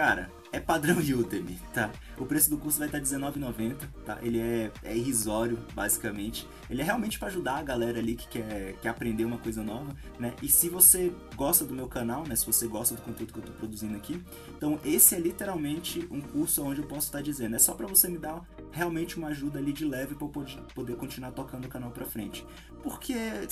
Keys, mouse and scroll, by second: 2.9-10.6 middle drag, 6.5 scroll up 2, 8.1 KP_0, 10.6-14.5 drag, 14.5-17.7 middle drag, 14.7 z, 15.0 Tab, 18.3-20.4 middle drag, 19.0 w, 19.4 Tab, 20.4-20.9 drag, 20.5 scroll up 1, 20.8 z, 20.9 middle click, 21.3-23.5 drag.